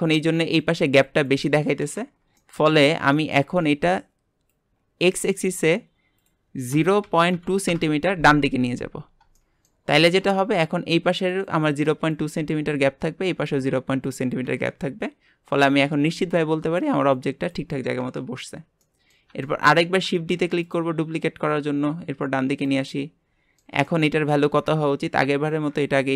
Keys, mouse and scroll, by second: 3.5-4.5 scroll up 1, 4.5 click, 6.2-8.9 drag, 8.9-9.3 scroll down 1, 9.3-14.7 shift+middle drag, 14.7 scroll down 2, 18.4 scroll down 2, 18.8-20.0 middle drag, 20.0 shift+d, 21.5 click, 22.9-25.5 shift+middle drag, 25.5 click.